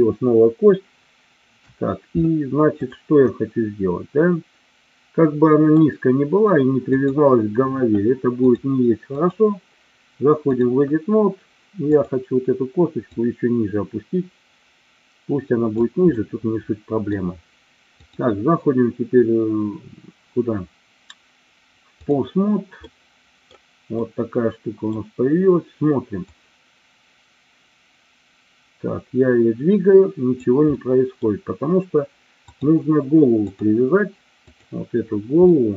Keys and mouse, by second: 2.8 click, 3.2-5.8 middle drag, 9.2-10.7 drag, 11.8 click, 13.0-15.8 drag, 16.3 middle click, 17.9-22.2 drag, 22.9 middle click, 24.0 middle click, 26.3-30.4 drag, 30.8 middle click, 32.5-33.6 drag, 35.4 middle click.